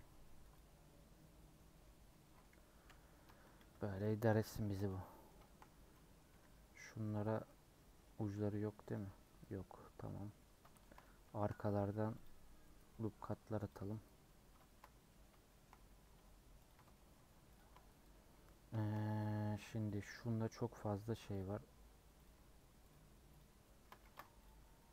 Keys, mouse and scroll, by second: 0.5 u, 1.4 scroll down 2, 1.5 middle click, 1.9 scroll up 1, 2.0 scroll down 1, 2.2 middle click, 2.8 /, 3.2 Tab, 3.6 h, 4.0 shift+middle click, 4.5 click, 4.7 Tab, 5.0 middle click, 5.6 scroll up 3, 5.9 middle click, 6.8 click, 7.4-8.9 middle drag, 8.9 alt+click, 10.4-11.5 middle drag, 11.5 scroll up 1, 12.2 alt+Left, 12.9 middle click, 13.7 alt+Left, 14.1 scroll down 1, 14.6-15.8 shift+middle drag, 15.8-16.2 scroll up 5, 16.6 alt+click, 16.9 shift+middle click, 17.5 alt+shift+click, 18.3-18.7 scroll up 2, 18.7-19.9 shift+middle drag, 19.9 alt+click, 22.2 alt+shift+click, 22.9 alt+shift+click, 23.4 alt+shift+click, 24.0 ctrl+z, 24.4 alt+shift+click.